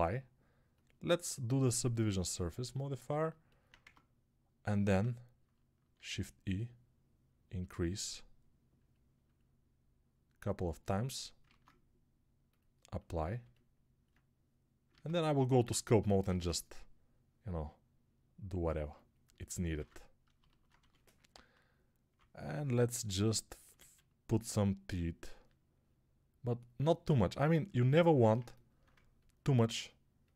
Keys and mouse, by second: 3.7 Tab, 6.0 shift+e, 11.3 ctrl+Tab, 14.8 ctrl+Tab, 16.1 shift+r, 19.7 ctrl+r, 20.6 1, 21.2-22.0 [, 23.6 ctrl+z.